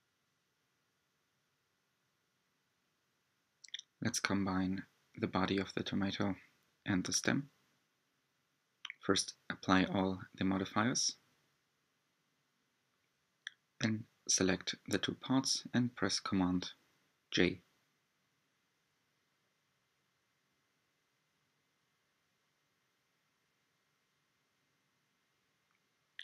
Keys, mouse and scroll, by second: 2.6 click, 5.5 click, 6.7 click, 11.0 shift+click, 12.5 j, 14.0-16.8 middle drag, 16.8 click, 17.4-18.5 scroll down 6, 19.2 shift+d, 22.0 click, 22.1-25.8 typing, 23.2 click, 23.8 click, 25.7 click.